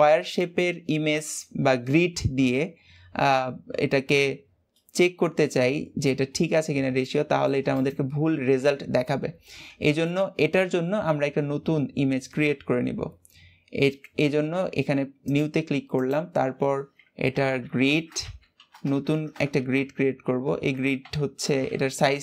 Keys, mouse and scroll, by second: 6.4-6.9 scroll up 3, 6.9-7.6 shift+middle drag, 7.6 click, 8.1-9.2 scroll up 2, 15.2-18.3 drag, 19.0 BackSpace, 19.3 BackSpace.